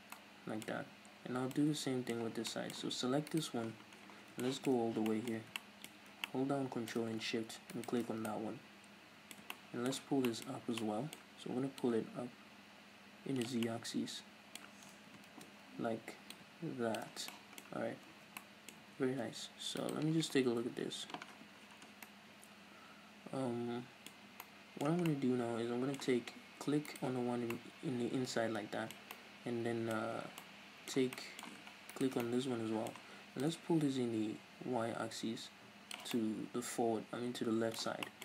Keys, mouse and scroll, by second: 2.2-2.5 scroll up 2, 3.3 right click, 3.7 scroll down 2, 4.4-6.0 shift+middle drag, 4.9 scroll up 2, 6.0 scroll up 2, 6.0-7.8 shift+middle drag, 7.8 ctrl+shift+right click, 8.1 scroll down 1, 8.3-10.6 middle drag, 10.5 scroll up 2, 10.9 middle click, 11.8-13.7 drag, 13.7-16.3 middle drag, 15.0 ctrl+z, 16.3-17.3 drag, 17.2 scroll down 2, 17.3-19.8 shift+middle drag, 17.9 scroll down 2, 18.1 Tab, 18.9 Tab, 19.1-19.8 scroll up 2, 19.8 right click, 20.7 KP_Decimal, 21.3-22.1 scroll down 2, 21.4-26.9 middle drag, 24.1-24.5 scroll up 2, 26.9 right click, 27.6-31.9 middle drag, 31.9 ctrl+shift+right click, 32.3-33.5 middle drag, 33.5-36.2 drag, 36.2-38.2 middle drag.